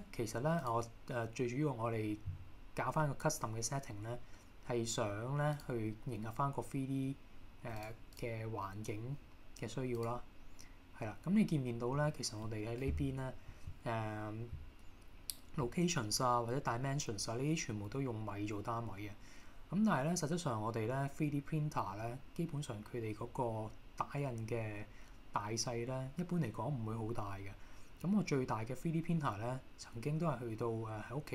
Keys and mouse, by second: 7.9 click.